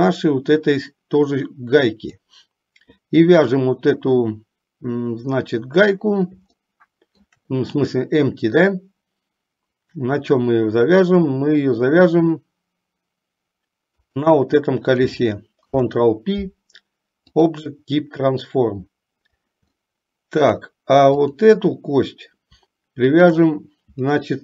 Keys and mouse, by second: 6.9 shift+middle click, 14.1 shift+click, 15.8 ctrl+p, 20.1-20.9 shift+middle drag, 23.3 shift+click.